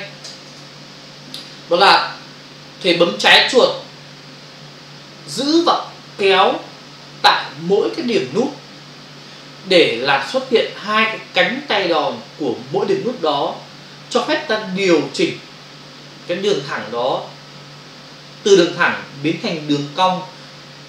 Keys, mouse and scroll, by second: 0.2 ctrl+Return, 0.5 ctrl+d.